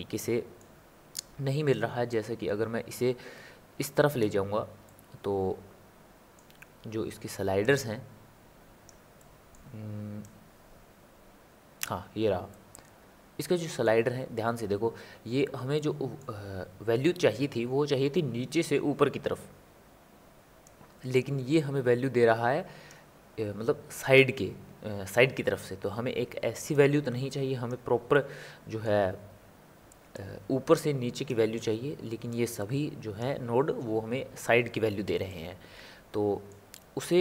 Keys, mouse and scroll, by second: 2.1-4.9 drag, 4.9-7.6 middle drag, 7.6-9.2 drag, 9.2-10.2 middle drag, 10.2-12.5 drag, 12.5-15.5 middle drag, 15.7-20.6 middle drag, 20.6-28.1 drag, 28.1-30.1 middle drag, 30.1-35.3 drag, 35.3-37.2 middle drag.